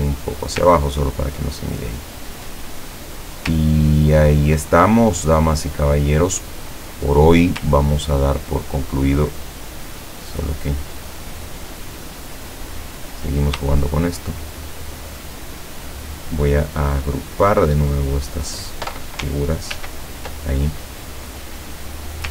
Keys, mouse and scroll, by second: 0.9-1.3 ctrl+scroll down 2, 2.6 click, 3.0 click, 3.7-4.3 ctrl+scroll down 2, 4.9-5.2 ctrl+scroll up 3, 5.3 click, 5.9-6.3 scroll up 2, 6.7-7.4 scroll down 4, 8.0 ctrl+scroll down 2, 8.6-8.9 ctrl+scroll up 2, 9.7 ctrl+click, 12.1 click, 13.1 click, 14.1 shift+click, 14.8 shift+click, 16.1-18.0 shift+drag, 19.8 ctrl+g, 21.0 scroll down 2.